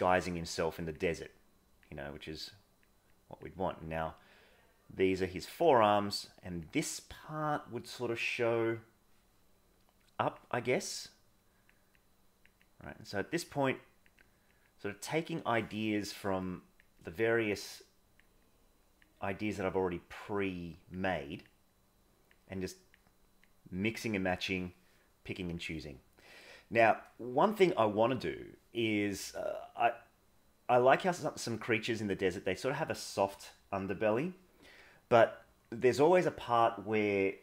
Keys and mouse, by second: 0.0 click, 0.7 click, 1.4 click, 2.2 click, 3.1 click, 3.7 click, 4.5 click, 5.3 click, 6.0 click, 6.7 click, 10.0 click, 11.0 click, 12.0 click, 12.7 click, 13.1 click, 13.7 click, 14.1 click, 14.9 click, 16.5 click, 17.1 click, 17.7 click, 18.5 click, 19.4 click, 19.8 click, 20.4 click, 21.2 click, 21.7 click, 22.5 click, 23.5 click, 24.1 click, 27.3 middle click, 29.4 click, 29.7 click, 29.9 click, 30.3 click, 31.5 click, 32.0 click, 32.3 click, 35.2 click.